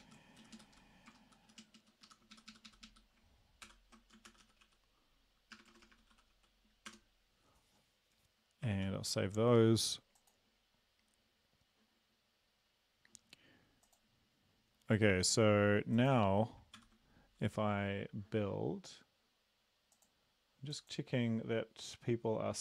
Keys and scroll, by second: 0.0 Up, 0.4 Down, 0.5 Down, 1.1-2.0 typing, 1.4 Down, 2.3 shift+Up, 2.5 shift+Up, 2.6 shift+Up, 3.1 shift+Up, 3.6 ctrl+p, 3.9-6.3 typing, 6.9 Return, 8.8 ctrl+s, 15.1 ctrl+`, 16.8 ctrl+c.